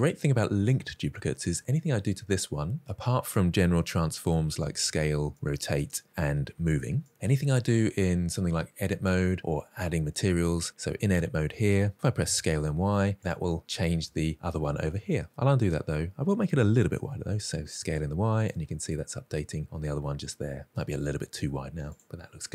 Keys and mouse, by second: 4.4 s, 5.3 r, 6.5 g, 8.6 Tab, 12.0 s, 12.3 y, 13.2 middle click, 14.3 middle click, 15.0 shift+middle click, 15.5 ctrl+z, 16.4 s, 16.7 y, 17.9 click, 18.3 middle click, 20.4 s, 20.7 y, 21.5 click, 21.9 middle click.